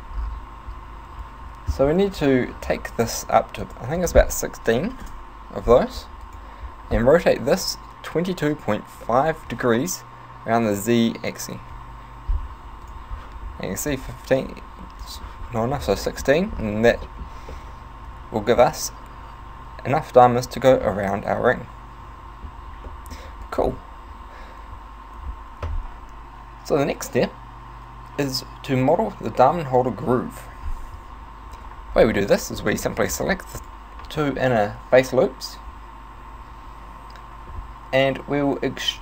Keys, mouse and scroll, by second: 3.7 click, 4.1 click, 6.3 right click, 7.5 r, 12.9 right click, 13.9 click, 15.0 click, 16.0 middle click, 16.9 z, 17.2 middle click, 17.6 middle click, 20.9 middle click, 23.0 middle click, 23.5 right click, 31.5 Tab, 32.0 scroll up 3, 32.6 alt+right click, 33.2 alt+shift+right click, 33.6 alt+right click.